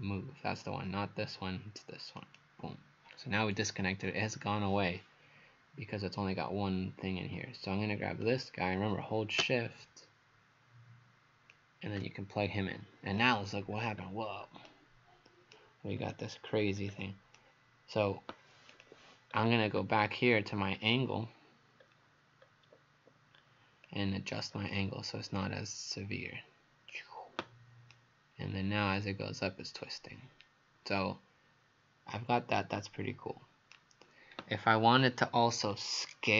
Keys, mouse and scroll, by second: 2.2 click, 13.7-14.7 scroll down 4, 14.7 right click, 16.0-16.6 scroll down 4, 16.6-17.4 scroll up 4, 17.4 right click, 18.7 click, 19.3-20.7 scroll up 4, 20.7 scroll down 1, 22.4-23.9 scroll up 1, 23.9 click, 27.9 right click, 34.3 Page_Up, 35.6-36.3 scroll down 1.